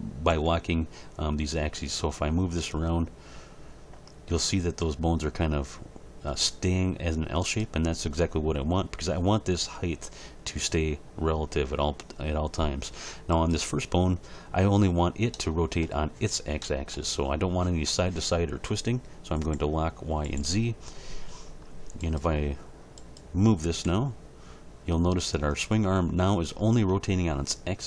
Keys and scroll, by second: 0.3 g, 23.9 g.